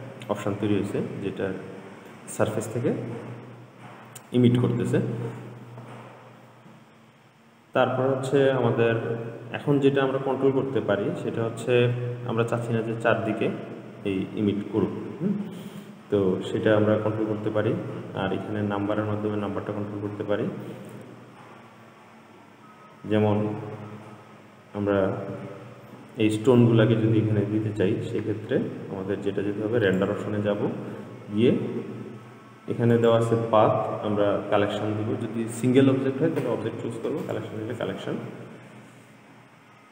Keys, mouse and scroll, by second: 0.6-3.6 middle drag, 21.6-22.7 scroll up 2, 22.7-24.0 scroll up 1, 24.0-25.3 scroll down 3, 25.3-26.0 scroll down 1, 26.0-27.2 scroll down 1, 27.2-30.1 scroll down 3, 30.1-36.3 drag.